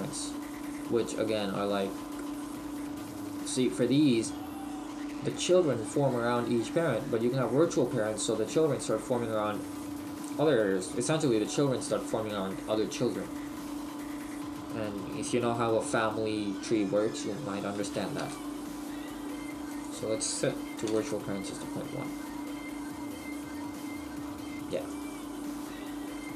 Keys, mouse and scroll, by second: 21.1 click.